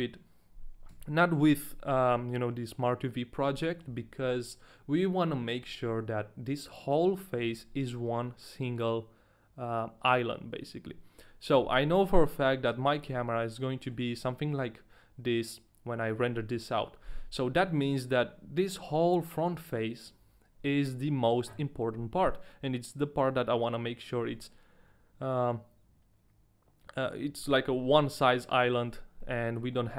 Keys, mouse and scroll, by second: 0.9 a, 1.4 u, 3.6 middle click, 4.0 a, 5.2-5.6 scroll up 1, 5.9 shift+middle click, 5.9 scroll up 1, 5.9 a, 6.0-6.6 scroll down 1, 11.5 Tab, 11.9 middle click, 12.4-12.9 scroll down 3, 13.2 Tab, 13.2 shift+middle click, 13.2 scroll up 1, 13.6 middle click, 14.0 scroll up 1, 14.6 shift+middle click, 14.6 scroll up 2, 14.7 scroll down 1, 14.9 middle click, 16.2-17.1 scroll up 1, 18.0 shift+middle click, 18.0-18.6 scroll up 1, 29.3 middle click.